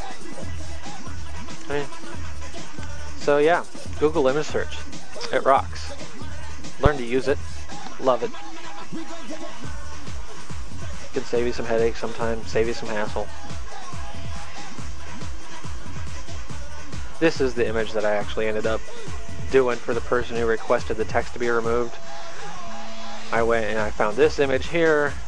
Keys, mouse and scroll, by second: 5.7 click, 6.9 click, 10.6 click, 12.5 click, 13.9 click, 15.1 click, 16.9 click, 21.4 click, 24.2 click.